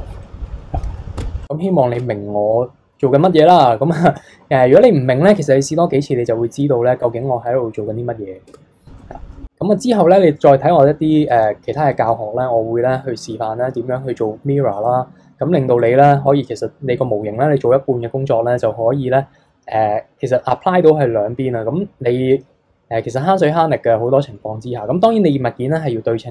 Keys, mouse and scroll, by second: 0.3 middle click, 1.2 Tab, 1.4 middle click, 1.9 Tab, 2.5-5.6 middle drag, 7.6-8.5 scroll up 1, 8.5 Tab, 9.0-11.7 middle drag, 13.0-14.6 middle drag, 14.6-15.8 scroll down 2, 15.8 click.